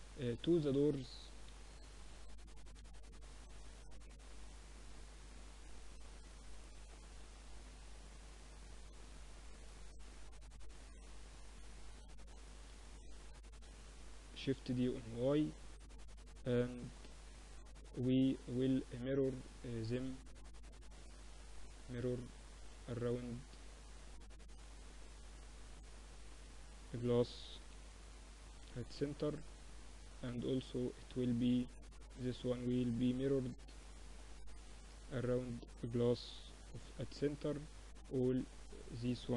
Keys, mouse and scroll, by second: 0.5 KP_7, 0.9 z, 1.8 a, 2.7 b, 6.4-10.7 drag, 10.5-15.5 middle drag, 12.4 shift+d, 16.1-21.9 middle drag, 21.9-23.8 drag, 25.3-27.0 drag, 29.1-30.7 drag, 30.7-31.7 middle drag, 31.7-33.5 drag, 31.7-32.8 right drag, 34.3-36.1 drag, 36.9-39.3 drag, 38.8 ctrl+l.